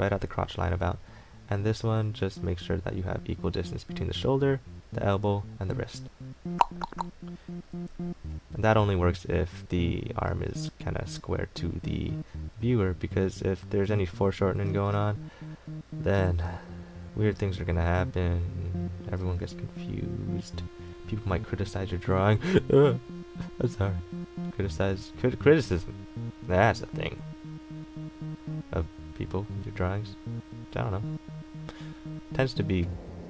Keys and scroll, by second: 10.5 ctrl+z, 16.3 ctrl+z, 19.4 ctrl+z.